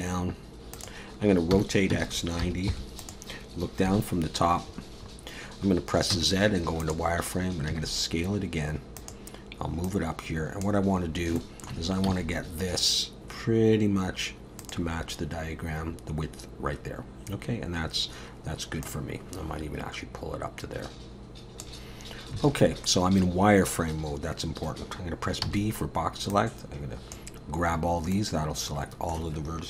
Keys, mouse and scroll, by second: 1.5 r, 3.9 KP_7, 4.7-6.1 scroll up 7, 6.1 z, 7.7 s, 9.8 click, 10.9-11.4 scroll up 3, 11.4 shift+middle click, 12.1 s, 17.5-18.8 scroll down 2, 18.8 click, 22.4 alt+a, 25.4 b, 28.1 middle click.